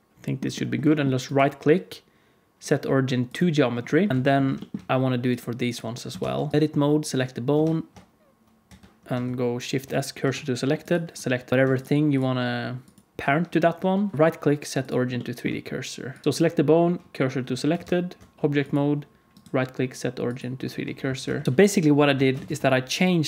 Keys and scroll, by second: 4.1 alt+a, 4.1 ctrl+s, 4.1 alt+z, 6.1 ctrl+Tab, 7.5 ctrl+Tab, 8.6 Tab, 9.1 shift+s, 10.1 Tab, 16.2 Tab, 16.2 shift+s, 17.7 ctrl+Tab, 20.6 r, 21.4 alt+a, 21.4 ctrl+s, 22.1 alt+a, 22.4 ctrl+s.